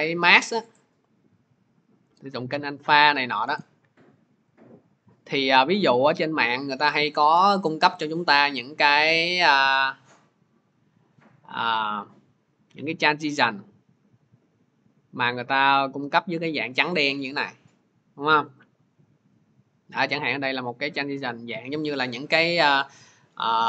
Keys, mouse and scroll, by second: 3.5 right click, 4.6 click, 6.9 click, 7.1 click, 8.0 middle click, 8.1 middle click, 8.4 middle click, 12.2-13.2 scroll, 16.9 click, 17.4 scroll.